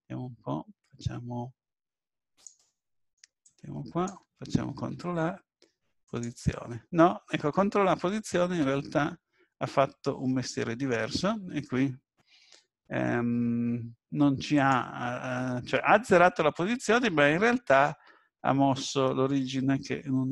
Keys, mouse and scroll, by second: 2.3 click, 3.4 click, 4.9 ctrl+a, 8.2-8.6 scroll down 2, 8.6-9.2 scroll up 2, 9.3-10.3 scroll down 1, 10.3-11.3 scroll up 2, 13.7 scroll up 1, 14.0-14.6 scroll down 2, 14.6 click.